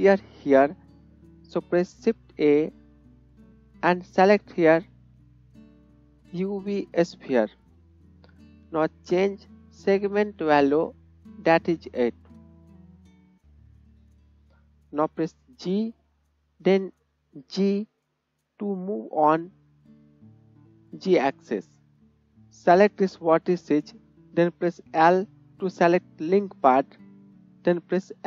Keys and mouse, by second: 2.3 shift+a, 2.6-3.6 shift+middle drag, 4.0-6.4 middle drag, 9.5-11.0 middle drag, 11.0-22.1 drag, 22.1 middle click, 22.9 click, 25.1 l, 25.1 l.